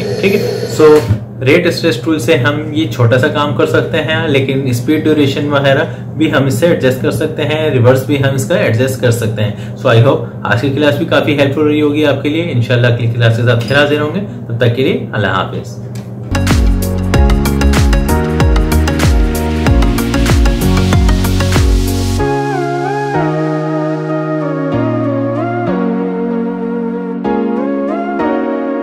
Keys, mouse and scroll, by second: 0.8 space.